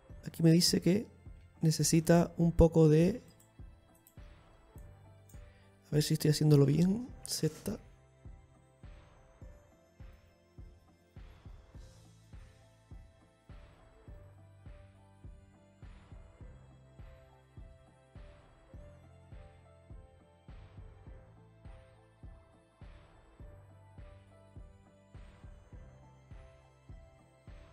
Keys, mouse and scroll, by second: 2.1 ctrl+r, 4.0 right click, 4.9 shift+right click, 5.5 click, 7.8 x, 9.8 z, 11.8 click, 14.8 ctrl+z, 15.3 middle click, 16.2-17.1 scroll down 1, 17.1-18.4 scroll down 7, 19.2 KP_Decimal, 19.9-21.0 scroll down 7, 21.6-22.2 scroll down 2, 21.6 KP_1, 23.5 shift+right click, 26.2 click.